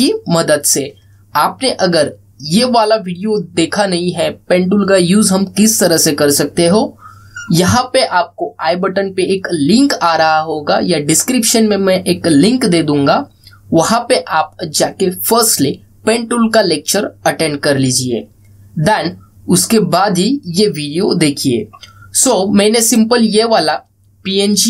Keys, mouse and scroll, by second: 23.7-24.6 drag.